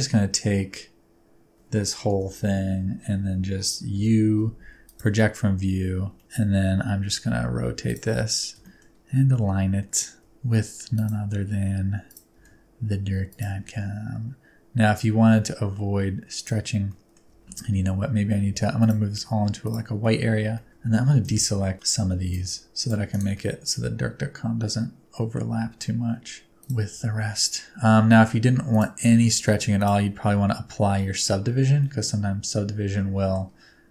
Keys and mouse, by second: 2.0 KP_7, 3.9 u, 6.2 shift+middle click, 6.2 a, 6.6 r, 7.8 click, 8.6 shift+middle click, 9.2 g, 10.2 s, 10.9 click, 11.2 r, 12.0 click, 12.3 g, 13.2 shift+click, 13.6 s, 16.3 click, 16.8 middle click, 17.3 alt+z, 18.4 g, 18.8 click, 19.1 s, 19.6 click, 20.3 alt+z, 20.5 middle click, 20.7 alt+z, 20.9 alt+z, 21.2 c, 22.3 shift+middle click, 23.3-25.3 middle drag, 25.5 alt+z, 25.7 middle click, 26.5 g, 26.6 click, 26.9 s, 28.7 click, 29.0 g, 29.7 shift+click, 31.8-33.3 middle drag.